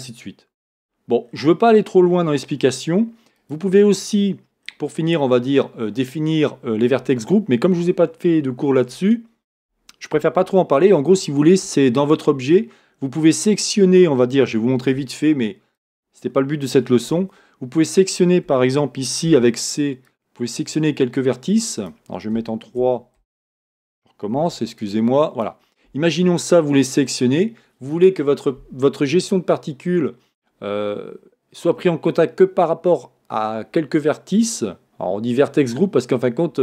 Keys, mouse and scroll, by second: 1.4-3.6 scroll down 1, 4.2 scroll down 1, 17.4 Tab, 20.7 c, 24.6 c.